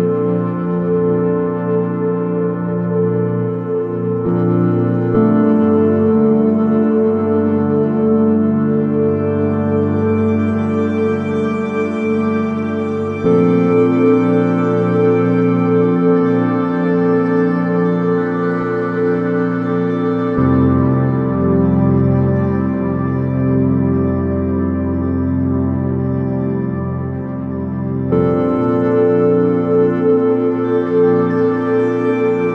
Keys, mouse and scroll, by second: 0.4 KP_1, 3.8-6.9 drag, 9.2-12.9 drag, 17.0 shift+a, 19.8-21.8 drag, 22.4-24.2 drag, 24.4 s, 29.1-30.8 middle drag, 30.8 s.